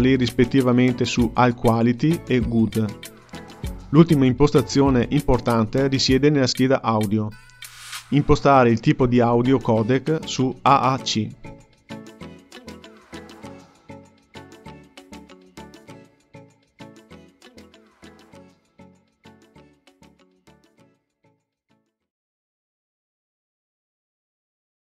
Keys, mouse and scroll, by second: 4.1-6.5 scroll down 1, 6.5-7.7 drag, 7.7-8.6 scroll down 2, 8.6-10.8 drag.